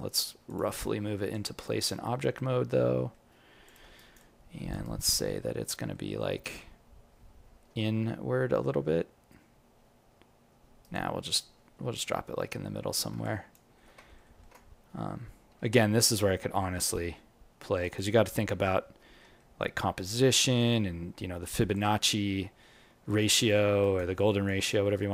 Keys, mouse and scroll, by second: 0.0 g, 0.7 alt+click, 1.6 alt+right click, 2.8 g, 3.9 alt+right click, 4.2 alt+click, 4.8 alt+right click, 5.1 alt+middle click, 7.5 g, 13.2 alt+click, 13.7 alt+middle click, 14.0 ctrl+middle click, 14.2 alt+middle click, 15.7 g, 18.3 scroll down 1, 18.4-19.1 scroll up 10, 19.1 g, 22.1-23.0 scroll down 12, 23.0 alt+click, 23.8 alt+right click, 24.1 alt+click, 24.6 alt+middle click, 24.9 alt+right click.